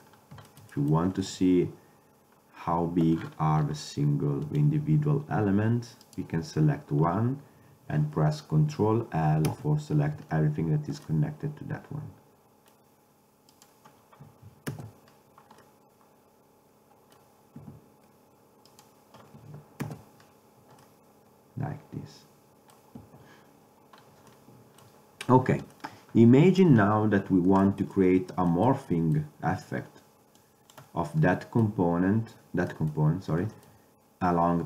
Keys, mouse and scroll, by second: 0.2 click, 1.8 Tab, 4.8-8.1 drag, 5.5 a, 9.7 ctrl+l, 13.8-14.9 drag, 14.9 ctrl+l, 15.3 middle click, 15.9 middle click, 17.7 a, 18.9-20.7 drag, 20.0 ctrl+l, 21.0 click, 21.9 middle click, 22.4 middle click, 23.7 Tab, 30.5-32.4 drag.